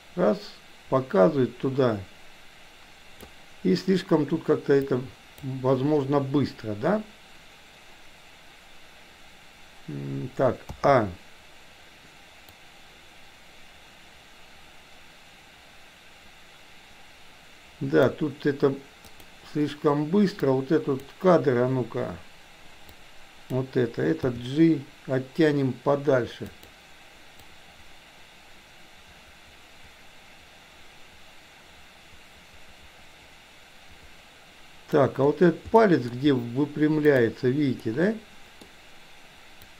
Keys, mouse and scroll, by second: 4.8 click, 10.8 a, 12.5-18.1 drag, 20.4 click, 22.9-23.5 drag, 24.3 g, 27.4-35.0 drag, 35.8 shift+middle click, 37.0 click, 37.8-38.6 middle drag, 39.6-39.7 drag.